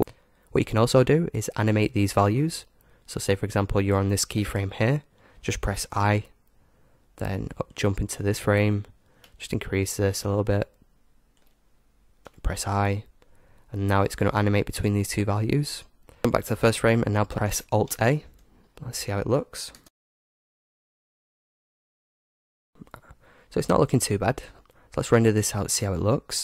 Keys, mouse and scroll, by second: 6.0 i, 7.6-11.5 drag, 14.1-17.3 drag, 17.8 alt+a, 19.9 KP_0, 24.5-26.4 drag.